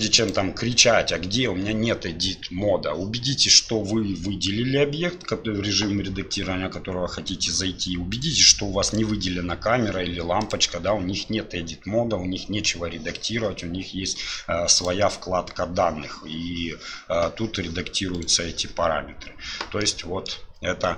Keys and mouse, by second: 0.2-9.0 drag, 14.8 click, 19.8-20.3 middle drag.